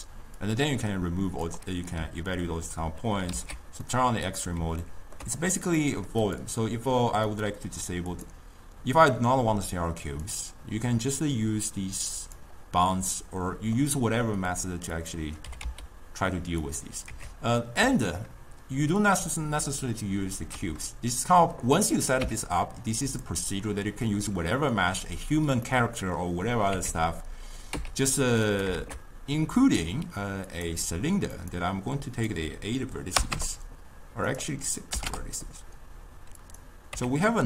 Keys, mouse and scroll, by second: 0.5-3.4 drag, 3.4 alt+z, 3.6 scroll down 1, 3.9-4.3 middle drag, 4.3 click, 4.9-5.3 ctrl+scroll up 1, 5.3 ctrl+middle drag, 5.5 click, 5.9 middle click, 6.3 click, 7.4-12.9 drag, 12.9-14.6 middle drag, 14.6 click, 15.1 click, 15.6 g, 17.2 Tab, 17.9 x, 22.3 Tab, 23.2 click, 25.8-26.8 middle drag, 26.8 Tab, 27.8 x, 28.8 shift+a, 31.4-36.6 drag.